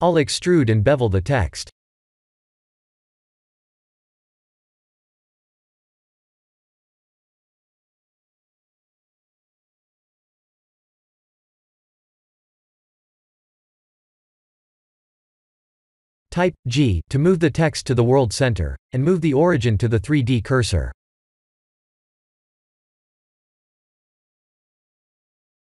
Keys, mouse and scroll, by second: 1.3 click, 6.5 click, 12.0 click, 12.9 KP_1, 13.1 KP_7, 15.8 click, 17.0 click, 18.4 g, 21.9 click.